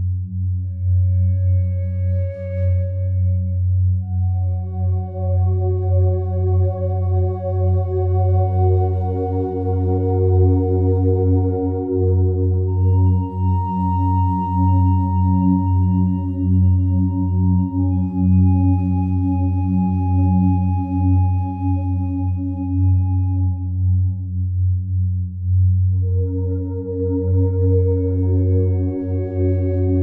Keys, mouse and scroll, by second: 3.0 a, 3.2 a, 5.5-7.0 alt+drag, 7.0 Tab, 9.0 ctrl+r, 11.5 ctrl+Tab, 12.0 ctrl+r, 14.4 click, 24.6 click, 26.4 3, 27.6-30.0 alt+drag.